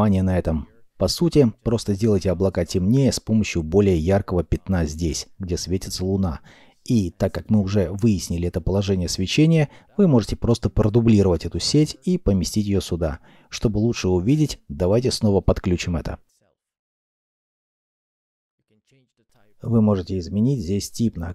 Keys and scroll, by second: 11.7 shift+d, 13.4 alt+p.